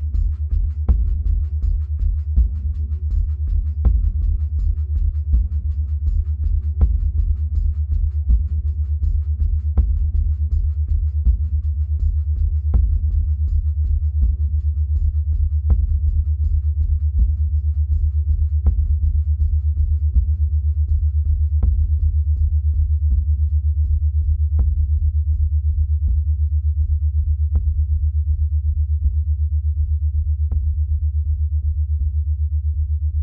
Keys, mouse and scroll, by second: 12.8 right click, 12.9-13.2 drag, 13.2-14.4 middle drag, 14.4-16.6 scroll down 2, 16.6 g, 23.1-26.0 middle drag, 26.0-27.2 right drag, 27.2-33.2 drag.